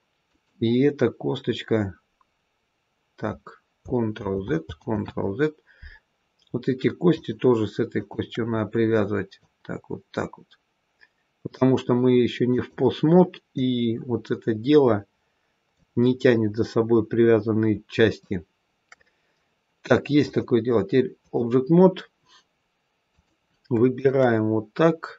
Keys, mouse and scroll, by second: 4.0 ctrl+z, 4.6 ctrl+z, 7.0 shift+click, 8.3 shift+click, 9.2 click, 13.5 click, 16.8-17.6 scroll up 2, 18.1 shift+middle click, 20.1 click, 23.0 click, 23.8 shift+click, 25.0-25.1 scroll down 2.